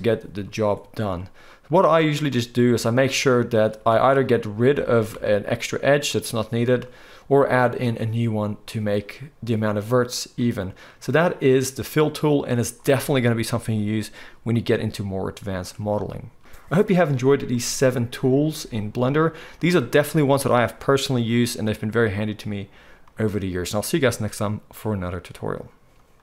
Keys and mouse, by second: 2.6 ctrl+click, 2.9 ctrl+z, 2.9 ctrl+middle click, 3.9 alt+a, 4.0-4.8 middle drag, 4.7 shift+a, 4.8 shift+click, 5.0 middle click, 5.1 x, 7.8-26.2 middle drag.